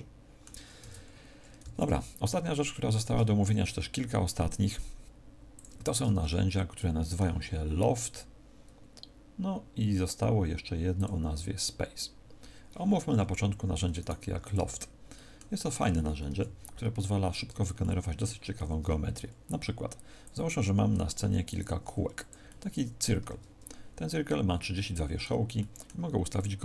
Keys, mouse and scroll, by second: 0.7 Tab, 1.5 x, 2.9 shift+a, 5.9 Tab, 6.7 middle click, 8.8-10.4 scroll down 1, 10.9 click, 12.9 Tab, 13.9 right click, 14.3 x, 15.5 middle click, 15.5-15.9 scroll down 3, 16.2 KP_1, 16.9-17.5 scroll down 1, 17.7 shift+middle click, 18.5 shift+a, 20.8 r, 21.5 click, 21.7 g, 22.2 click, 22.4 middle click, 23.1 Tab, 24.5 middle click, 25.5 middle click.